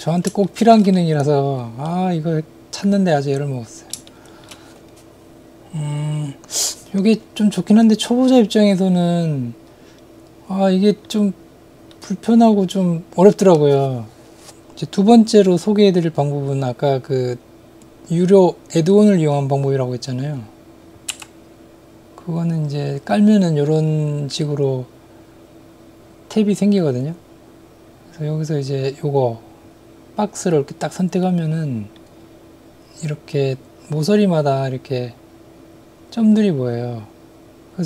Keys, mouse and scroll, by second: 0.5 shift+middle click, 0.9-3.9 middle drag, 4.1 shift+middle click, 6.6-11.2 middle drag, 12.0-12.6 middle drag, 20.9 click, 21.1 n, 23.0 click, 30.5 click, 31.4 middle click.